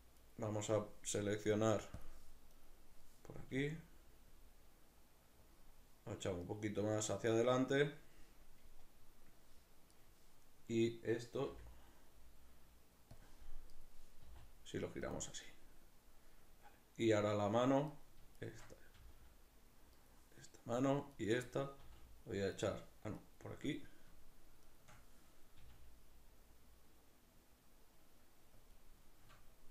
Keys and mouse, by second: 0.3 right click, 2.0 click, 2.6 right click, 3.5 g, 5.5 click, 6.5 right click, 10.0 right click, 11.5 r, 13.2 click, 13.8 right click, 14.2 r, 15.1 click, 17.9 right click, 18.4 shift+right click, 18.9 g, 20.0 right drag, 21.1 shift+right drag, 21.8 g, 22.7 right click, 23.3 right click, 25.6 g, 28.7 click.